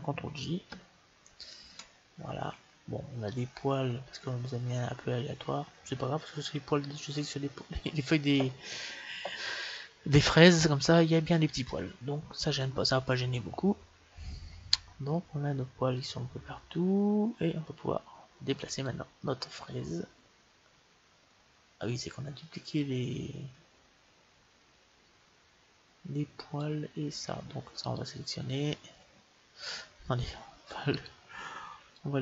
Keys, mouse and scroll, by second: 0.9 ctrl+j, 2.5 middle click, 3.4-4.9 middle drag, 10.5-14.1 middle drag, 17.5-19.3 middle drag, 19.0-20.6 drag, 27.8-29.6 right drag, 29.6-32.1 middle drag, 30.8-32.2 right drag, 32.1-32.2 drag.